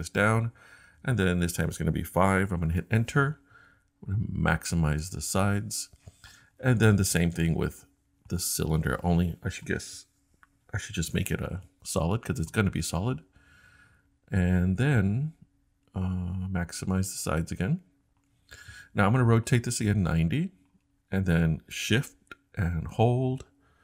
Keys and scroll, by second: 2.3 5, 2.6 Return.